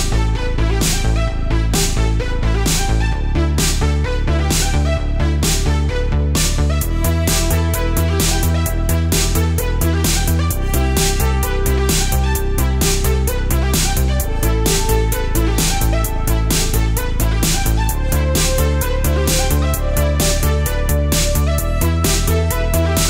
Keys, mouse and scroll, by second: 1.8 click, 2.3 middle click, 4.0 click, 4.8 click, 5.8 shift+click, 6.4 shift+middle click, 7.2 x, 8.5 middle click, 9.5 2, 11.0 alt+click, 12.3 s, 12.6 y, 13.8 Return, 14.9 click, 15.6 middle click, 16.4 Tab, 17.0-17.6 middle drag, 17.6 Tab, 18.7 3, 18.9 click, 19.5 shift+click, 20.0-21.2 middle drag, 22.5 g, 22.6 z.